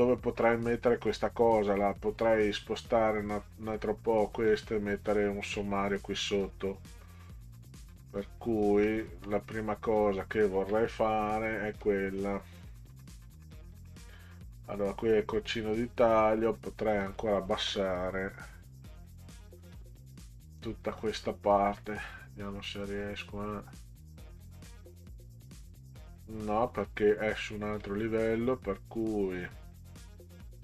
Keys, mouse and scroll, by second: 2.4 click, 6.5 middle click, 8.9-9.3 middle drag, 11.8 click, 17.0 click, 19.5 click, 21.1-23.4 drag, 27.8-28.2 drag.